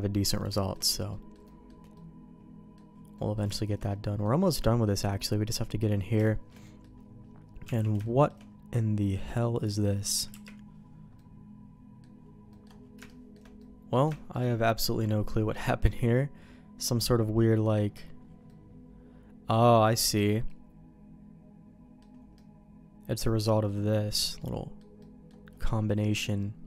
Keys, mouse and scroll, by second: 0.2 middle click, 0.5 shift+middle click, 1.1 middle click, 1.4 middle click, 1.9 middle click, 3.1 middle click, 3.5 shift+middle click, 3.9 middle click, 4.4 middle click, 5.5 middle click, 6.2 shift+middle click, 6.6 middle click, 7.6 Tab, 8.0 middle click, 8.7 middle click, 9.6 click, 10.3 KP_Decimal, 11.1 middle click, 12.5 middle click, 13.0 shift+middle click, 13.6 middle click, 14.1 shift+middle click, 14.5-15.6 middle drag, 15.8-17.7 middle drag, 18.4-19.8 middle drag, 20.4-22.0 middle drag, 22.3-23.3 middle drag, 23.6 middle click, 24.4 middle click, 25.0 middle click, 25.9 middle click.